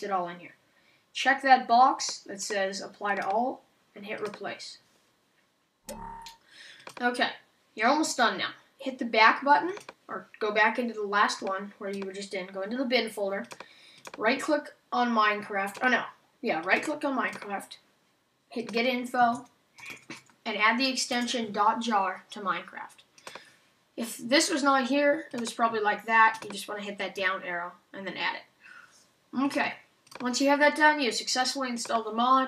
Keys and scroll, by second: 21.1 Return.